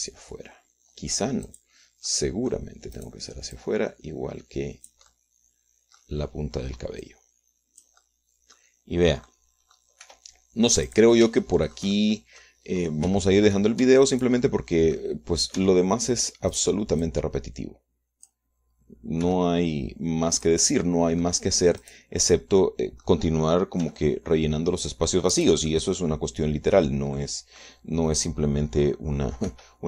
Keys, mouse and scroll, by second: 0.3 g, 2.8 click, 3.2-4.9 middle drag, 3.4 click, 4.4 click, 4.9-6.4 drag, 6.4-8.4 middle drag, 7.1 click, 8.4-10.1 drag, 9.4 middle click, 10.6 click, 11.4 r, 12.2 click, 12.8-14.0 shift+drag, 14.2 scroll up 2, 14.6 shift+right click, 15.2 shift+Tab, 15.5-16.5 shift+right drag, 17.0 Tab, 18.4-19.8 drag, 20.6 r, 21.8-22.8 drag, 22.8 middle click, 23.2 click, 23.5 middle click, 24.0 click, 24.6 middle click, 25.2 g, 26.8 click, 27.9-29.8 drag.